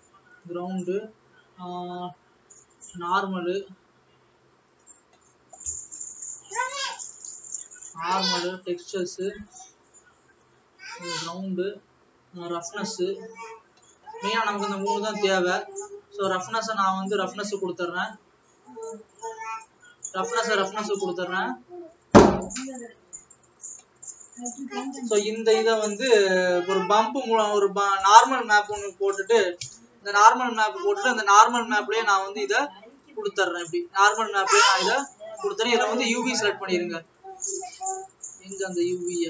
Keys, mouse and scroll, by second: 30.8 click, 32.9 click, 33.8 click, 35.4 click, 37.1 click, 38.2 click.